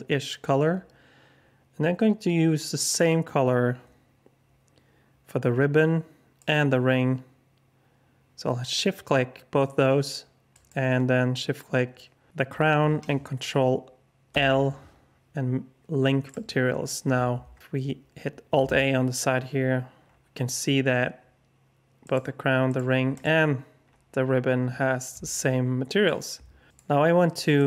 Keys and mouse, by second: 10.6 shift+click, 14.3 ctrl+l, 18.5 alt+a, 22.0 click, 25.3-26.0 alt+shift+drag.